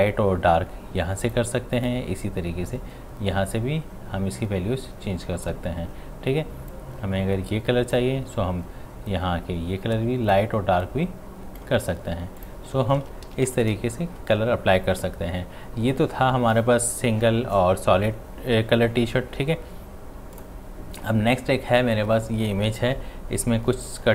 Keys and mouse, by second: 13.3 ctrl+d, 13.5 v, 20.3 v, 20.4 click.